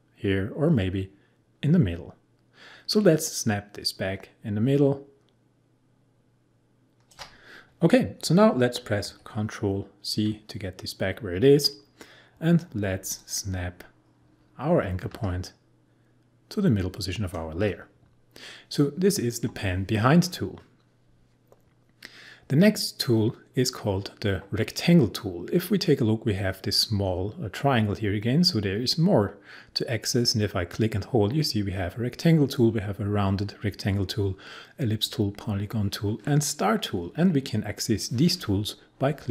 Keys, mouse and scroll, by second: 9.0 ctrl+z, 13.2-19.9 drag.